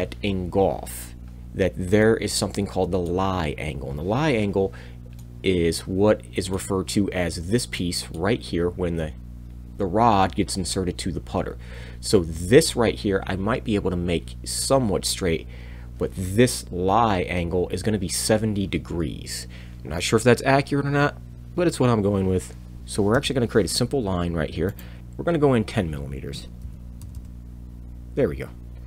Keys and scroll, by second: 22.8 Escape, 22.8 r, 25.0-27.0 typing.